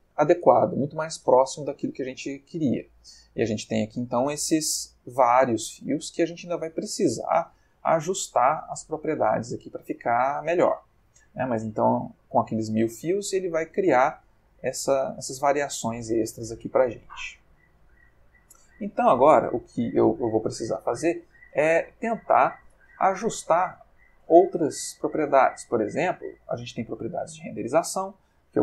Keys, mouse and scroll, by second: 4.3-6.1 ctrl+middle drag, 8.8 middle click, 9.7 ctrl+middle click, 10.6 ctrl+middle click, 13.2-13.9 ctrl+middle drag, 16.0 ctrl+middle click, 17.9 click, 26.2 click.